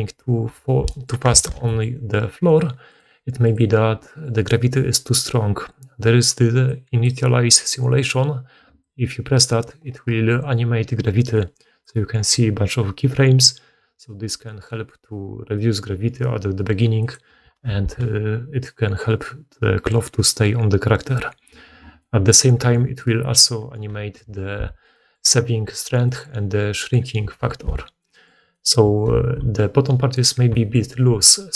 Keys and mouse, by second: 0.5 shift+space, 1.2 alt+a, 17.6 shift+space, 24.2 shift+space, 27.3 shift+space, 29.1 shift+space.